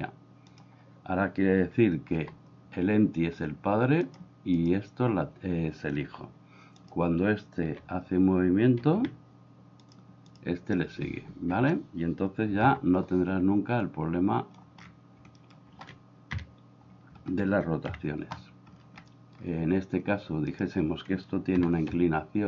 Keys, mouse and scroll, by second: 2.2 g, 7.7 r, 8.9 r, 12.7 n, 13.9 click, 15.4 middle click, 16.3 KP_7, 18.0 KP_1, 19.2 shift+middle click, 21.6 r.